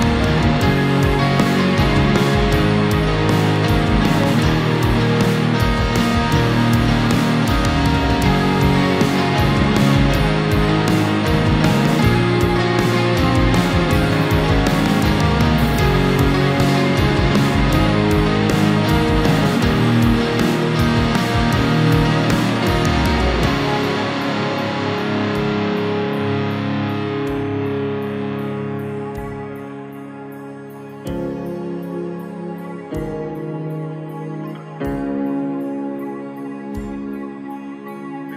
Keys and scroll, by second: 9.4 ctrl+j, 17.3 ctrl++, 20.2 space, 26.3 space, 34.0 space, 36.4 space.